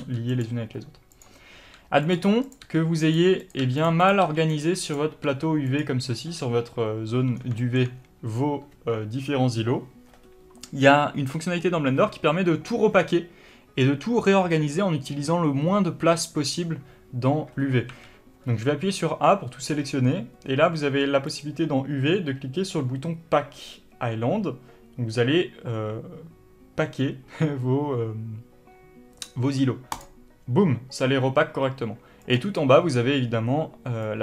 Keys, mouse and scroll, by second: 0.0 click, 0.3 g, 0.7 click, 1.4 click, 1.9 g, 2.8 click, 2.9 g, 3.7 click, 3.9 g, 4.3 click, 4.5 g, 5.1 click, 5.6 g, 6.1 click, 7.7 scroll down 1, 7.9-21.6 shift+middle drag, 18.7 scroll up 1, 21.6-32.8 drag.